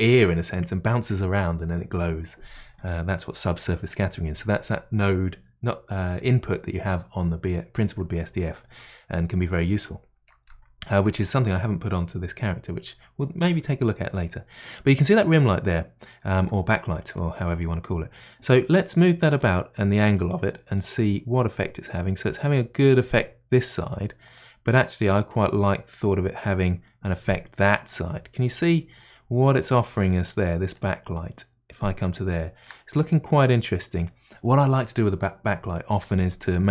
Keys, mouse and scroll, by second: 19.4-22.5 drag, 24.7-26.0 middle drag, 26.0-28.5 drag, 28.5 middle click, 29.3-30.9 scroll up 3, 30.9-34.0 middle drag, 34.0-36.7 drag.